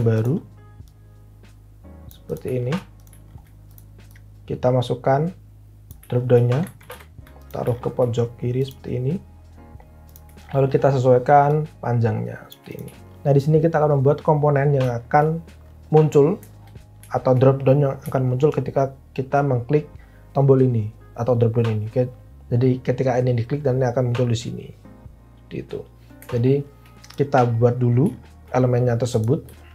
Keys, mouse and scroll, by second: 6.8 alt+a, 7.5 alt+w.